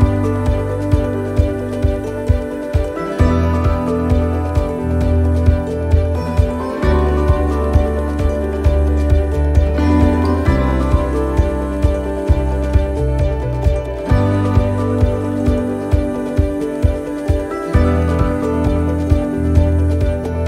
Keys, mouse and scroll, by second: 0.6 middle click, 1.5 middle click, 5.8 ctrl+z, 7.5 e, 13.4 alt+s, 15.5 alt+s, 17.0 middle click, 18.1 middle click, 19.2 middle click, 20.1 middle click.